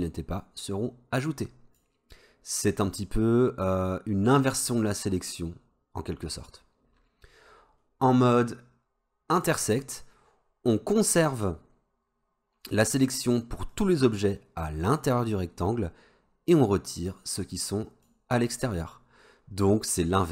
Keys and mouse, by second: 9.4 click, 13.8-18.3 drag.